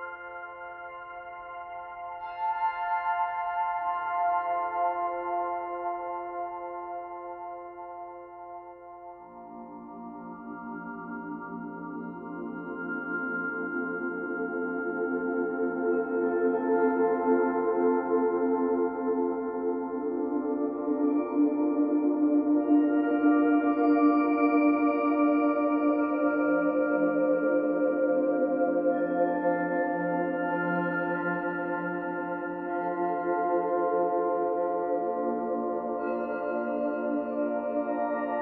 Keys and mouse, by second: 1.0 click, 2.2 ctrl+s, 4.5 click, 5.6 alt+shift+click, 7.8 m, 8.4-9.6 drag, 9.4-15.1 typing, 17.3-21.7 drag, 17.3 typing, 21.7-27.3 typing, 28.9-30.1 drag, 30.1-34.3 typing, 36.5-37.3 typing, 36.8 click, 38.2 ctrl+alt+click.